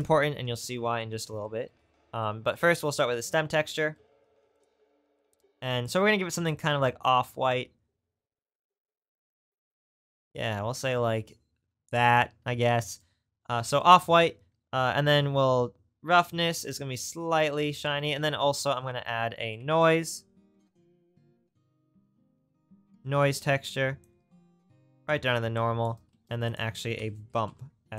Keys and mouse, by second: 2.6-4.5 middle drag, 6.1-16.8 middle drag, 18.0 shift+a, 22.3-24.1 right drag.